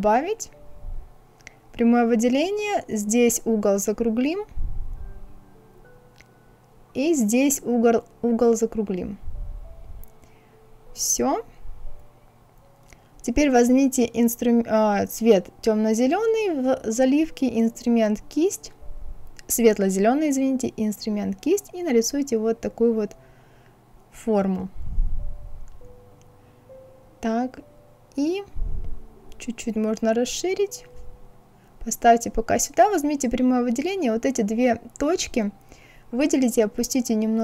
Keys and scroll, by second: 35.1 Down.